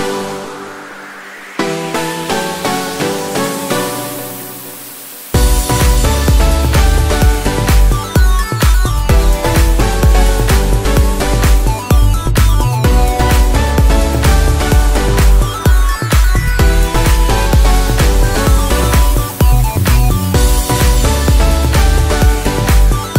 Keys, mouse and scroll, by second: 9.7 space, 9.8 click, 10.2 space, 10.7-13.6 drag, 13.6 ctrl+z, 14.4-21.6 drag, 22.8 space.